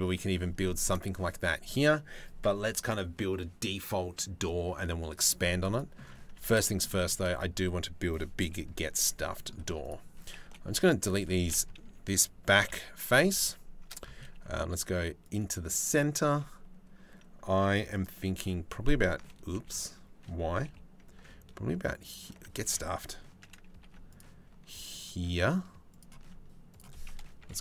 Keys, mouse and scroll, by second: 0.2 shift+middle click, 5.3 middle click, 5.9 Tab, 6.2 shift+middle click, 8.7 middle click, 9.2 3, 9.4 click, 10.0 Delete, 12.2 KP_3, 13.9 ctrl+r, 15.8 ctrl+r, 22.2 ctrl+z, 23.4 ctrl+r, 26.3 click.